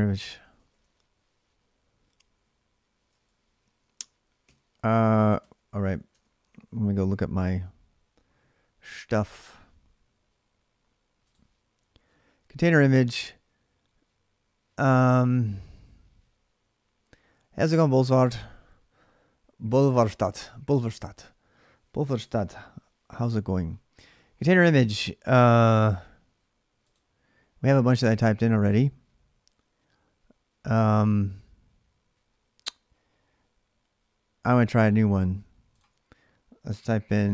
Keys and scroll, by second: 0.0-0.6 typing, 3.4 ctrl+a, 4.2 3, 5.2 ctrl+c, 5.9 alt+Tab, 6.7 alt+Tab, 36.5-37.3 typing.